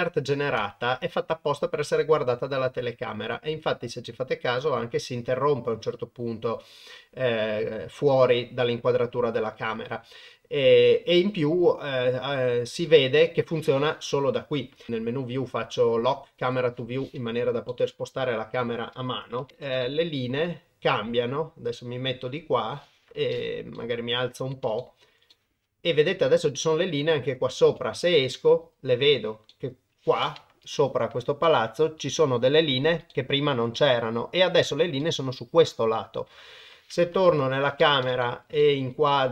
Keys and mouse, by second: 0.6 KP_0, 9.9 KP_0, 10.7 KP_0, 14.9 n, 16.4 click, 17.7-18.5 shift+middle drag, 19.4 n, 19.5 shift+middle click, 19.8-20.2 ctrl+middle drag, 20.5-22.7 middle drag, 23.7-24.3 shift+middle drag, 24.8 shift+middle click, 25.3 middle click, 27.7 KP_0, 28.2-28.5 middle drag, 28.6 middle click, 29.5 middle click, 30.7 shift+middle drag, 31.4-31.9 middle drag, 32.2-32.5 shift+middle drag, 33.1-33.6 shift+middle drag, 33.8-34.5 middle drag, 35.0-36.3 middle drag, 37.3 KP_0, 38.2 shift+middle drag, 38.6-39.3 middle drag.